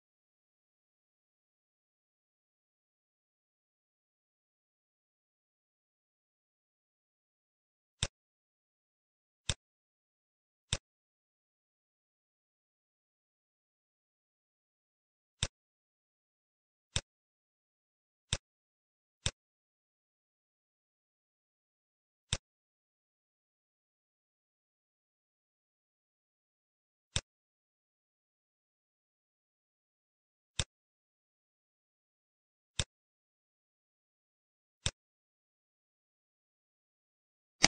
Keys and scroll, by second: 0.0-4.8 typing, 5.0 Left, 5.8 Return, 24.0 ctrl+s, 36.3 Delete.